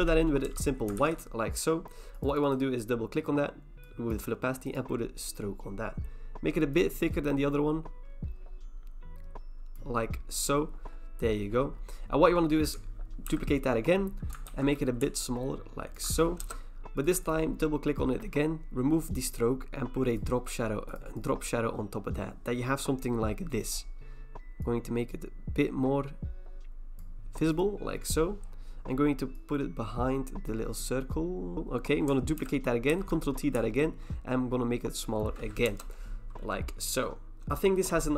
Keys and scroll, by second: 0.5 alt+BackSpace, 1.0 ctrl+d, 13.3 ctrl+j, 14.5 ctrl+t, 16.4 Return, 32.4 ctrl+j, 32.9 ctrl+t, 35.7 Return.